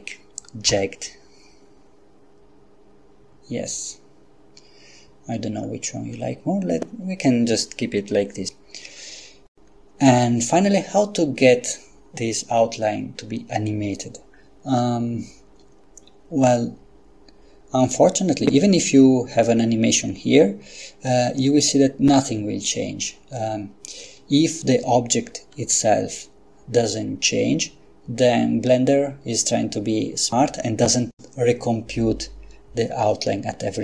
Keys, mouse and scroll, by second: 0.7 F12.